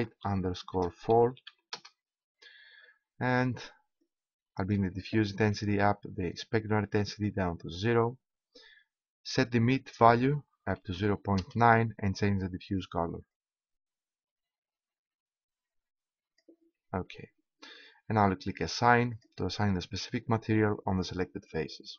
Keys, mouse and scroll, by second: 4.0-5.7 drag, 18.0-19.1 middle drag, 19.1-21.0 drag.